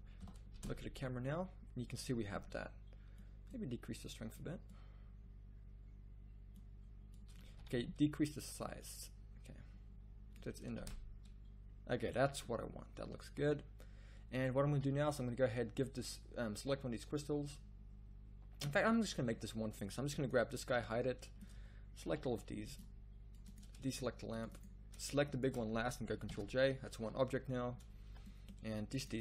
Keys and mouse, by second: 0.2 KP_0, 0.7 shift+z, 7.6 z, 7.6 z, 11.0 shift+z, 14.5 z, 14.7 z, 20.7 h, 21.5 z, 22.0 c, 26.3 ctrl+j, 28.0 a.